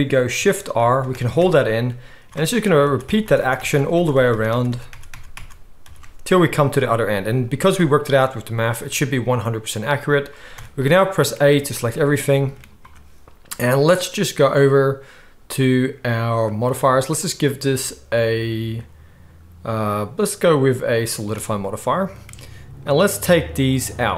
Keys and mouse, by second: 0.8-5.8 typing, 7.3 z, 10.5 a, 11.5 z, 16.7-17.2 middle drag, 17.2-24.1 drag.